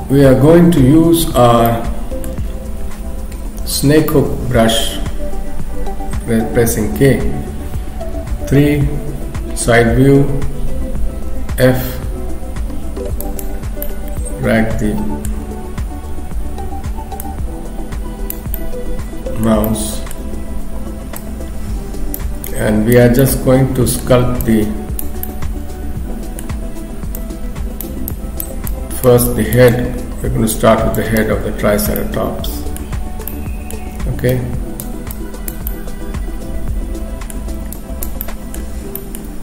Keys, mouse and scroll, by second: 1.7 middle click, 3.7 k, 8.4 KP_3, 9.4-9.8 scroll up 2, 11.2 f, 13.8 middle click, 17.2 click, 18.6 middle click, 19.6 shift+middle click, 21.2 click, 22.5 click, 23.2 middle click, 24.4 click, 25.2 middle click, 27.2 click, 28.1 click, 29.3 click, 29.7 shift+click, 30.2 shift+click, 31.0 click, 31.2 shift+click, 32.0 middle click, 33.3 middle click, 34.3 click, 35.2 click, 35.7 middle click, 37.8 click, 38.8 middle click, 39.0 shift+middle click, 39.2-39.4 scroll up 1.